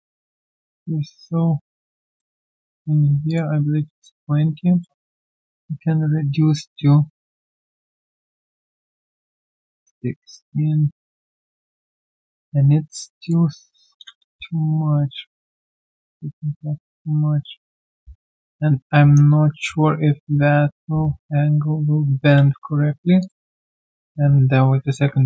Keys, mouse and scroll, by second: 4.8 middle click, 14.3 typing, 17.2 typing, 23.4-24.1 typing.